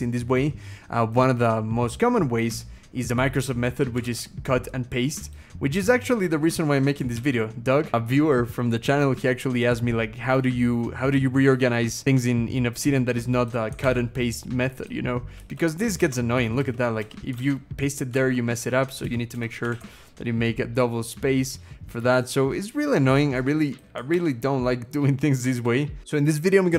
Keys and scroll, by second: 3.9 ctrl+x, 4.4-5.9 scroll down 1, 5.9 Return, 6.3 Return, 6.9 ctrl+v, 9.9-10.9 scroll up 1, 10.9-12.5 scroll up 1, 13.6 ctrl+x, 14.0-14.9 scroll down 3, 15.2 Return, 15.8 shift+Return, 16.4 BackSpace, 16.8 BackSpace, 17.2 ctrl+v, 18.3 ctrl+z, 18.3 BackSpace, 19.1 Return, 19.1 BackSpace, 19.5 ctrl+v, 20.4-22.5 scroll up 1, 23.9 ctrl+x, 24.4-25.6 scroll down 2, 25.8 Return.